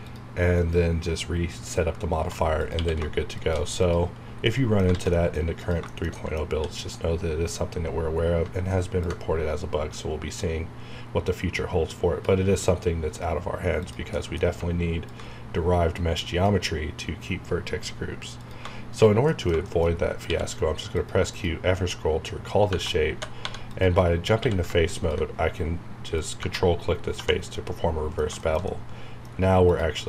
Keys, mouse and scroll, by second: 1.4-1.7 scroll down 1, 1.7 scroll up 1, 2.2 1, 2.6 click, 4.1-4.5 scroll down 1, 4.5 middle click, 5.1 middle click, 5.6 click, 5.9 shift+middle click, 6.5 d, 8.2 scroll up 1, 9.0-13.8 ctrl+drag, 14.1 middle click, 15.1-18.4 ctrl+drag, 19.3 middle click, 19.6 middle click, 19.9 shift+scroll up 1, 20.2 q, 21.0 click, 22.7 Tab, 22.9-24.4 typing, 23.7 click, 24.9 ctrl+click, 26.8-27.1 scroll down 1, 27.5-29.6 middle drag, 29.6 click.